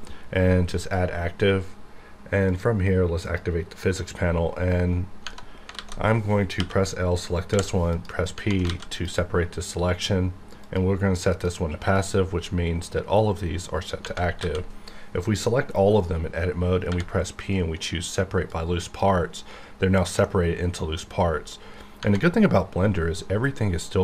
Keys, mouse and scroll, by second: 0.8 click, 0.9 click, 5.2 Tab, 5.7 alt+a, 6.6 l, 7.5 p, 7.9 click, 8.3 Tab, 8.7 alt+a, 8.9 click, 13.9 Tab, 14.4 a, 16.9 p, 18.5-20.2 drag, 20.2 middle click, 21.0-22.0 scroll up 1.